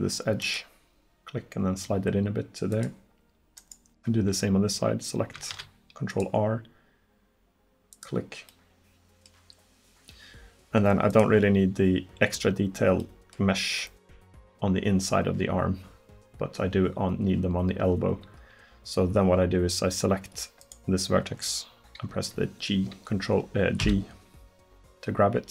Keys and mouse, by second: 3.6-5.6 drag, 5.6 ctrl+r, 8.5 click, 11.1-13.1 drag, 20.7-23.0 drag, 23.9 g.